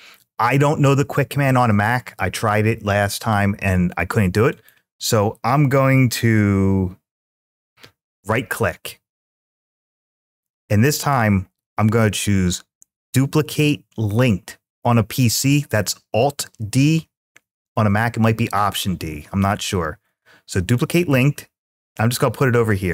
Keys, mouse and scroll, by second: 4.3-20.7 right drag.